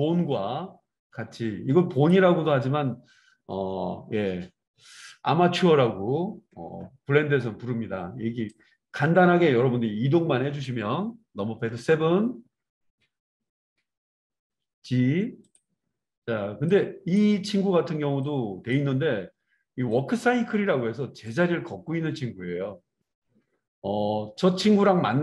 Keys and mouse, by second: 11.6 KP_7, 14.4 g, 15.5-16.6 middle drag, 16.6-25.2 drag.